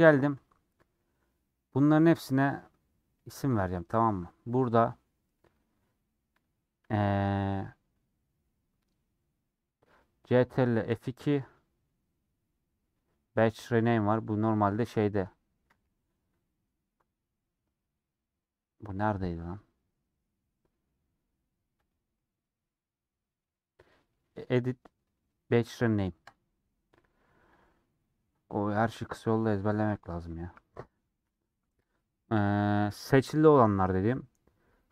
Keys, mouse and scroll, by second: 0.4 shift+click, 0.9-3.4 middle drag, 3.4-34.9 drag.